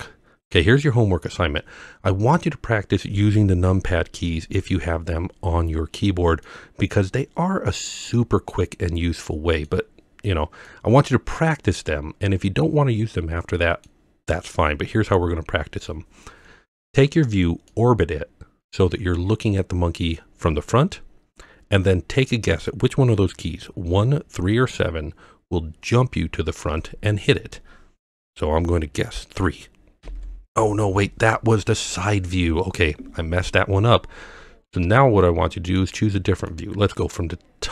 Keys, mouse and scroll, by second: 0.8-1.4 middle drag, 6.5-9.7 middle drag, 10.7-13.9 middle drag, 17.7-20.2 middle drag, 20.5-20.9 scroll up 4, 21.6-22.0 scroll down 1, 30.0 KP_3, 35.0-35.8 middle drag, 36.5-37.7 middle drag.